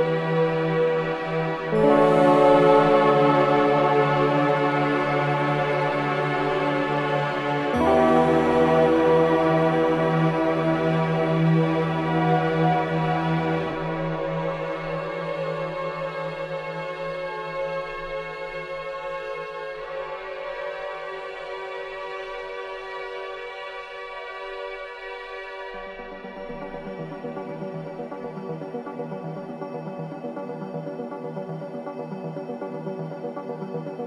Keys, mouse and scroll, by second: 0.7 ctrl+z, 1.9 ctrl+z, 4.2 ctrl+z, 5.9 ctrl+y, 6.7-7.0 scroll up 1, 7.6-12.5 drag, 12.5-12.9 scroll down 1, 14.2-18.1 drag, 18.1-18.5 scroll down 1, 18.6 scroll up 1, 20.0 scroll down 1, 20.7 click, 21.5 scroll down 1, 22.2 scroll up 1, 23.1 click, 23.5 scroll up 1, 24.9-28.0 drag, 28.0-28.7 scroll down 1, 28.7 click, 29.1-29.5 scroll up 1, 31.0 click, 32.9-33.9 typing.